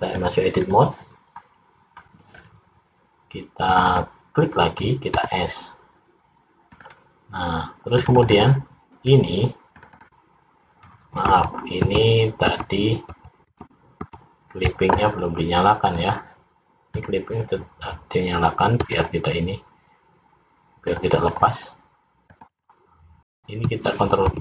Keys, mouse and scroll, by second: 0.2 click, 1.4 middle click, 1.4 scroll up 1, 2.5-3.5 scroll up 3, 3.9 click, 4.1 click, 5.3 s, 8.1 click, 8.5 click, 8.7 click, 9.8 click, 10.2 click, 11.5 ctrl+z, 12.1 ctrl+z, 12.8 ctrl+z, 13.4 ctrl+z, 13.6 ctrl+z, 14.2 ctrl+z, 16.0 click, 17.0 click, 18.9 s, 21.4 click, 22.4 click, 22.8 click, 24.3 ctrl+b.